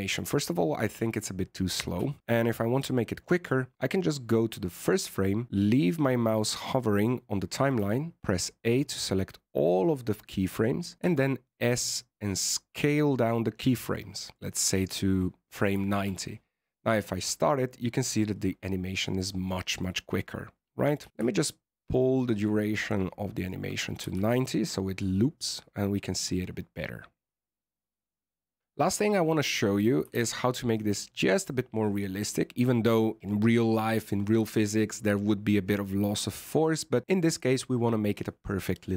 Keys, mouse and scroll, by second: 1.8 alt+a, 2.4 click, 7.5 a, 7.7 a, 11.0 s, 15.8 alt+a, 19.0-20.8 scroll up 8, 19.4 middle click, 21.0 alt+a, 21.1 click, 24.1 alt+a, 24.6 scroll up 3, 25.1-26.8 scroll down 2, 28.0 click, 28.6-28.9 scroll down 1, 29.0 shift+middle click, 30.1 alt+a.